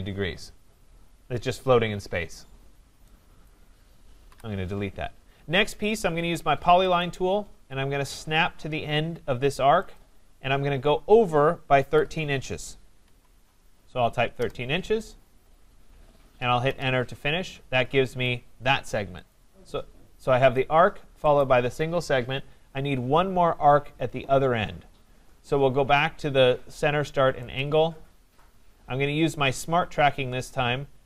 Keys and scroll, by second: 4.3 Delete, 14.3 Return.